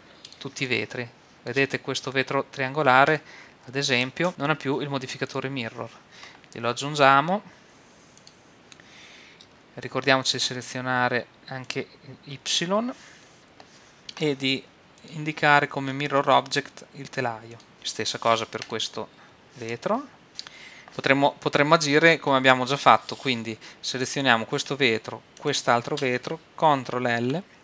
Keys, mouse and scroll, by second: 0.4 middle click, 1.3-2.7 middle drag, 3.4 right click, 4.3 click, 5.3-8.1 drag, 9.4-11.7 middle drag, 11.7-13.5 drag, 15.0-16.7 drag, 16.7-18.5 middle drag, 18.9-20.3 right drag, 20.3 middle click, 25.5-27.6 right drag, 27.2 ctrl+l.